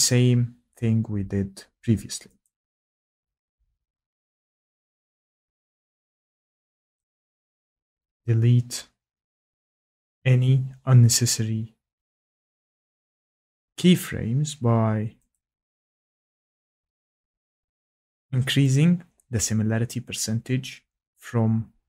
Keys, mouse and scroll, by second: 2.4 click, 4.4 click, 6.9 click, 7.0 click, 13.6 click, 15.3 click, 16.8 click.